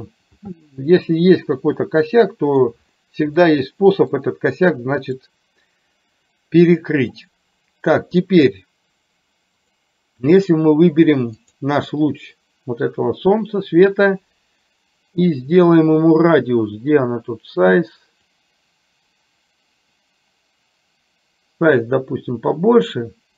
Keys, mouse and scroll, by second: 1.9-2.8 middle drag, 3.4-4.3 middle drag, 5.1 click, 9.7 click, 11.4 click, 18.6-23.3 drag.